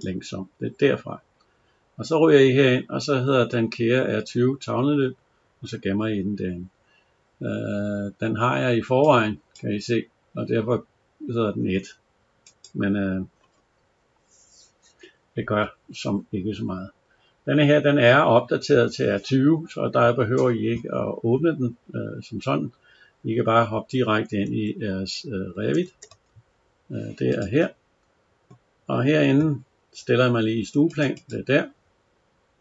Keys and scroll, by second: 24.3 alt+Tab.